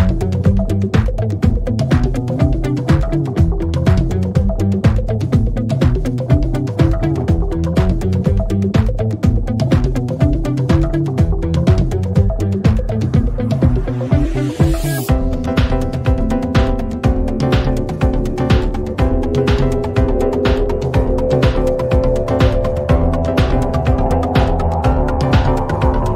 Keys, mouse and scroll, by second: 0.0-1.1 drag, 2.8 click, 5.0 click, 10.6 click, 11.2 u, 12.4 ctrl+d, 16.4 click, 19.6 click, 20.1-21.1 typing, 20.6-21.9 drag, 24.9 click, 25.6 click, 25.7 click, 25.8 click, 26.0 click.